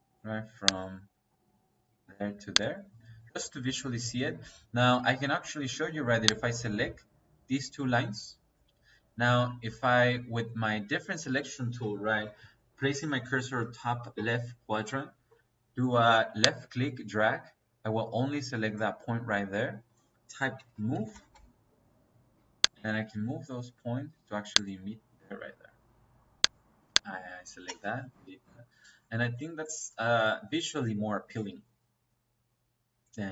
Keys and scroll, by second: 20.5-21.2 typing, 24.9 Escape, 27.6 Delete.